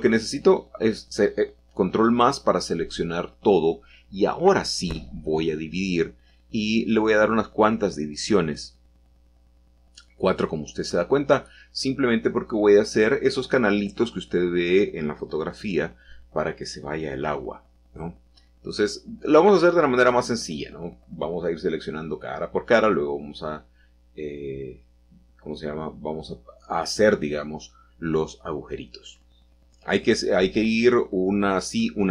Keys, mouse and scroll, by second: 3.4 right click, 4.1-5.2 drag, 7.2-8.9 drag, 9.3-10.4 drag, 11.4-14.3 middle drag, 14.0-14.8 scroll up 4, 14.3 click, 14.3 right click, 14.4 middle click, 14.5 click, 14.5 right click, 14.7 shift+middle click, 15.8 3, 18.5-20.0 scroll up 2, 20.7 click, 21.8 shift+click, 22.8 shift+click, 23.3-24.2 scroll up 1, 25.1 shift+click, 26.5 shift+click, 27.5 shift+click, 29.5 ctrl+z, 31.1 shift+middle click.